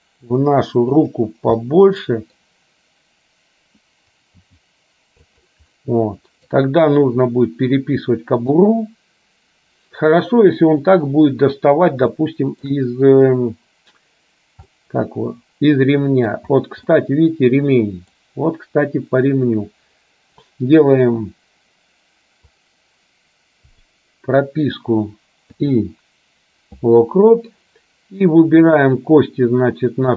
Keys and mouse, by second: 1.7 middle click, 4.4 g, 5.8 middle click, 7.4-8.7 middle drag, 12.2 shift+middle click, 14.8-16.3 middle drag, 17.0-18.3 middle drag, 22.7 click, 23.9 click, 28.8 click.